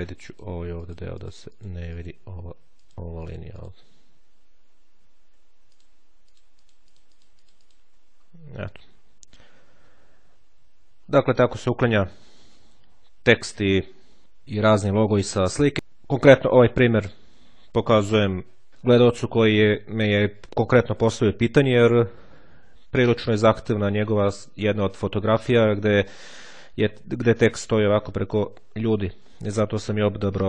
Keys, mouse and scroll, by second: 0.7-2.5 drag, 2.7-4.1 drag, 4.2 click, 5.6 ctrl+click, 6.5-7.9 drag, 7.9-8.9 ctrl+scroll down 1, 9.0-9.5 ctrl+scroll down 1, 9.7-10.1 ctrl+scroll down 1, 22.3 click.